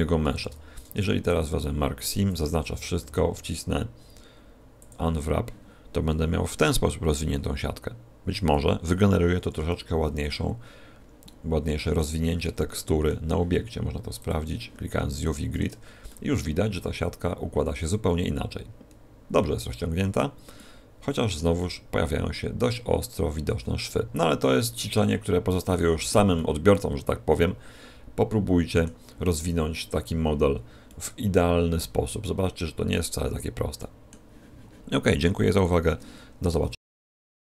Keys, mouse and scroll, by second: 0.2 ctrl+e, 2.0 a, 2.1 a, 2.6 y, 3.0 u, 8.8 a, 11.2 middle click, 12.0 z, 12.4 middle click, 14.3 click, 15.2 middle click, 15.6 Tab, 16.0 middle click, 20.5 middle click, 24.9 middle click, 26.3 middle click, 30.8 middle click, 33.7 middle click.